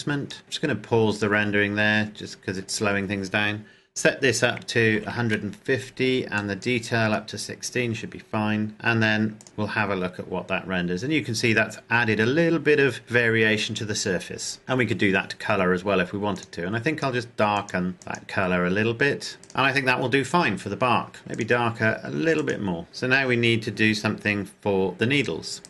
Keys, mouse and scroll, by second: 1.3 click, 4.8 KP_1, 5.0 KP_0, 5.3 KP_Enter, 6.6 click, 9.6-10.7 scroll up 1, 10.7 click, 14.6 shift+middle click, 16.5 click, 21.5 click, 24.9-25.6 scroll down 1.